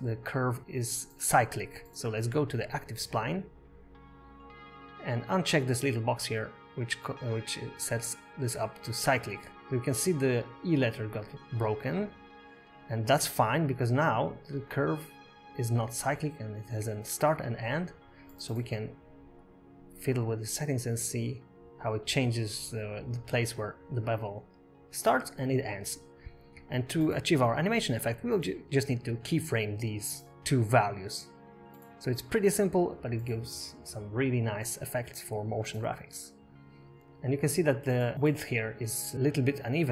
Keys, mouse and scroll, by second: 4.7 click, 5.4-7.7 scroll down 2, 8.6 click, 11.2-11.7 scroll up 1, 14.3 click, 19.7 click, 21.3 click, 27.4 click, 32.4-33.1 scroll up 1, 33.1-34.4 scroll up 2, 34.4-34.8 scroll up 4, 34.8 shift+middle click, 35.5 scroll up 3, 36.0 shift+middle click, 37.5-38.1 scroll up 3, 38.1 click, 39.4 click.